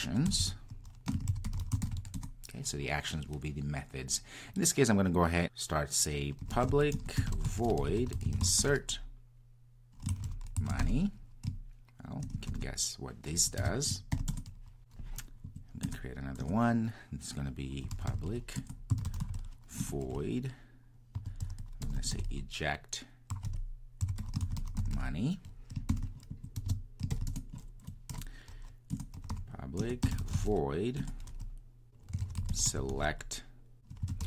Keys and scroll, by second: 6.9 Return, 18.6 Return, 29.8 Return.